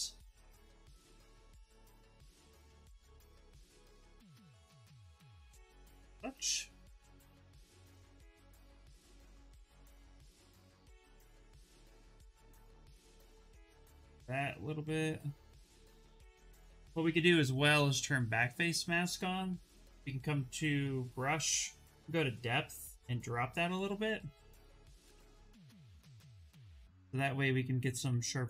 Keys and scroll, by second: 10.0 ctrl+z, 10.3 s, 13.5 ctrl+z, 16.7-17.4 typing, 25.0 s.